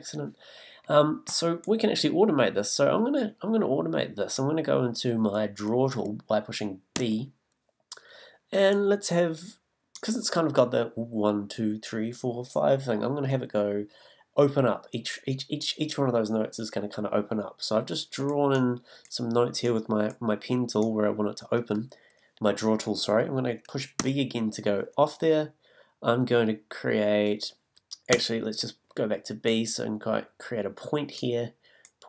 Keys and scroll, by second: 7.0 b, 24.0 b, 28.1 b.